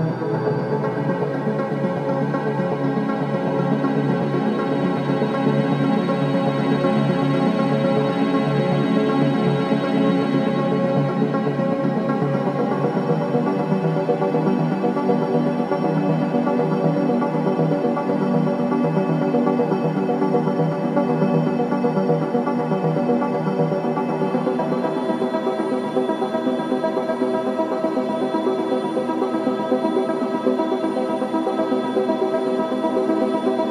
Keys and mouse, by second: 2.0 typing, 2.0-2.8 drag, 2.9-4.1 drag, 4.2-4.5 typing, 6.7 click, 7.8-11.1 drag, 11.6 typing, 11.6 click, 12.5-13.9 drag, 14.0-14.4 typing, 15.9 click, 16.9-25.5 drag, 27.2-29.9 ctrl+alt+drag, 27.2 typing, 30.5 Left, 30.5-30.9 typing, 30.7 Left, 30.8 Left, 30.9 Left, 31.5 Right, 31.8 Right, 32.8 click, 33.1-33.7 drag.